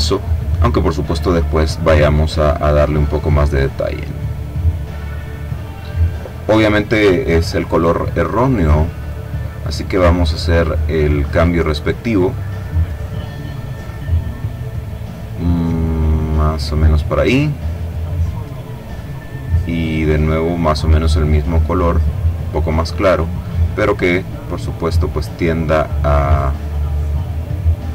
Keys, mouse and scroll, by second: 1.4-5.2 drag, 8.3 click, 10.5 click, 12.0-16.8 drag, 18.3 click, 19.5-22.8 drag, 26.4-27.9 drag.